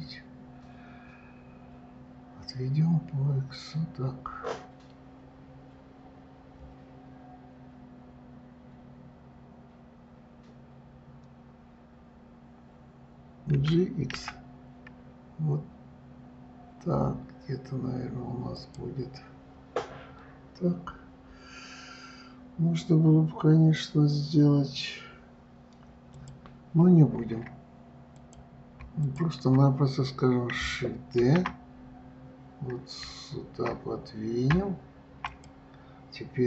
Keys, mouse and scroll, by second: 13.8 g, 26.4 click, 28.4 click, 29.3 shift+click, 31.5 shift+d.